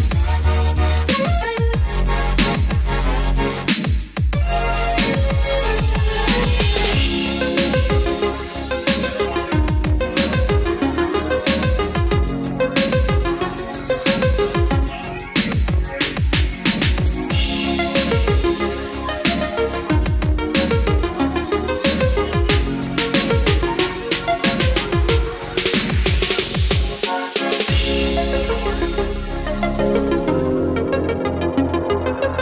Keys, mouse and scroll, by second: 5.0 click, 8.1 KP_5, 9.7-14.1 drag, 15.1-24.2 drag, 24.9-27.3 scroll up 1, 27.3 space, 27.4-32.4 drag.